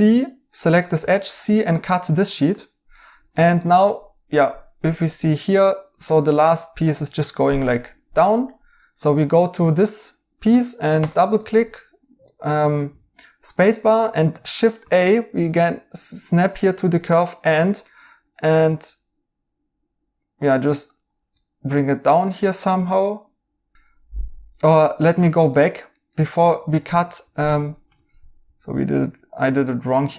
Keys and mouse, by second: 0.9 c, 2.9 right click, 5.2 right click, 8.3 right click, 11.3 right click, 14.7 a, 21.3 right click, 23.7 ctrl+z, 25.0 right click, 26.4 ctrl+z, 27.4 Escape, 27.9 ctrl+z, 28.1 ctrl+z.